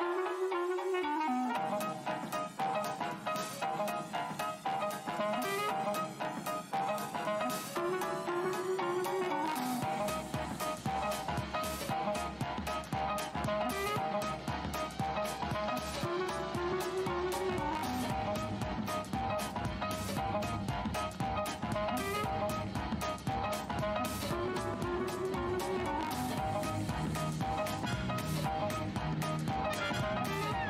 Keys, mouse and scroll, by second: 1.1 alt+click, 3.7 right click, 4.0 click, 4.1 scroll down 1, 4.8 alt+scroll down 1, 4.8 shift+x, 6.6 alt+scroll down 1, 6.7 alt+scroll up 1, 7.4 shift+x, 9.4 click, 12.0 scroll up 1, 12.9 click, 15.2-16.0 scroll up 1, 15.2 w, 16.1 click, 19.1 f, 20.4 click, 21.3-21.9 alt+scroll down 1, 21.3 w, 22.0 click, 22.8 v, 25.9 right click, 27.2-28.1 typing, 28.8 click.